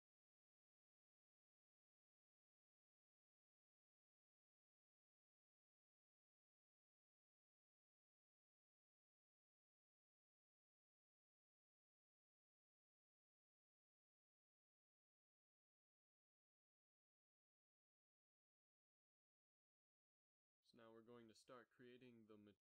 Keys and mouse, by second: 3.2 middle click, 8.3 s, 12.5 g, 14.5 a, 15.5 ctrl+s, 19.8-21.0 drag, 21.6 n.